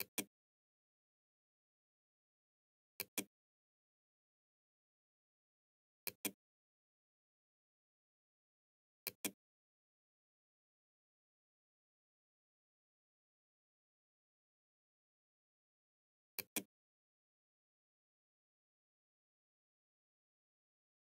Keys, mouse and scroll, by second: 2.0 click, 5.1 click, 7.6-8.7 drag, 10.4 middle click, 15.5 click.